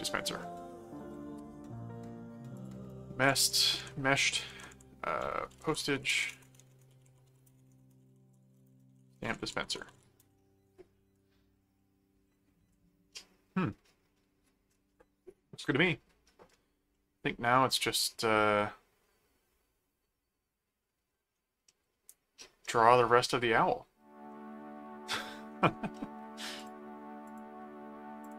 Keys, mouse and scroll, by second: 2.5 click, 5.3-10.4 typing, 11.7 middle click, 12.7-14.8 middle drag, 16.9-21.2 middle drag, 21.7-23.7 middle drag, 24.3 middle click, 25.9 middle click, 26.6 click, 27.2 click, 28.2 click.